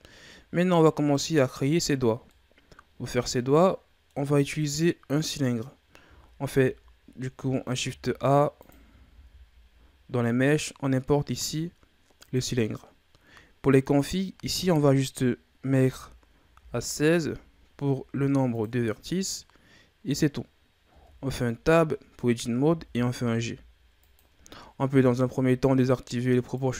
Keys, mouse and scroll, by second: 0.2-3.2 scroll down 2, 8.5 click, 9.0 shift+a, 13.9-17.0 drag, 20.8 Tab, 22.6 g, 24.5-25.1 ctrl+scroll up 1, 25.1-26.5 scroll down 2, 26.5 click.